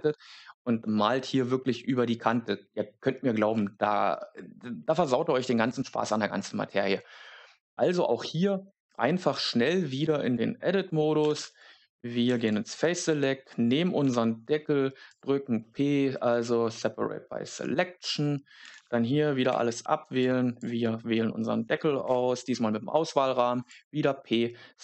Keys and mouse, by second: 7.5 Tab, 10.0 3, 11.1 a, 11.3 a, 12.2 c, 13.0 right click, 14.0 p, 17.3 a, 17.5 a, 18.0 a, 19.4 b, 20.1 click, 22.0 p, 24.3 right click.